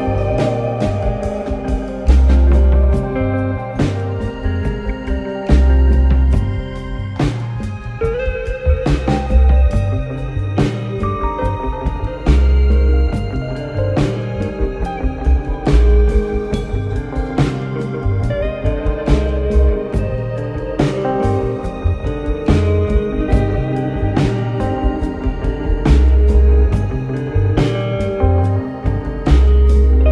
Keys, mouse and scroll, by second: 0.4 click, 1.2 click, 1.9 click, 2.2 click, 2.7 click, 3.1-6.1 drag, 7.0 Tab, 7.5-8.3 scroll down 1, 8.6-9.7 scroll up 2, 9.7 click, 10.5 Tab, 11.9 click, 13.1 alt+click, 14.2 alt+click, 14.6 alt+click, 16.2 ctrl+b, 24.3 click, 25.3 click, 27.0 alt+click, 27.5 alt+click, 28.8 ctrl+b.